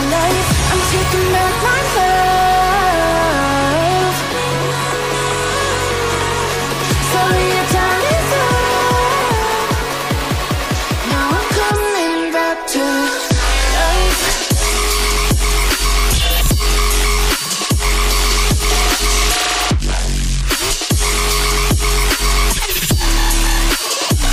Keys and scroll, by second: 14.2 ].